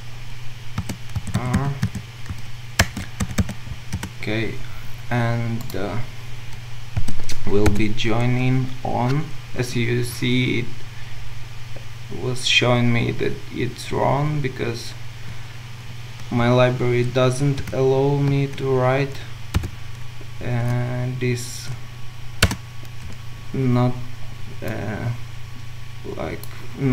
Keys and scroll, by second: 2.8 shift+Return, 9.6 Escape, 22.5 Return.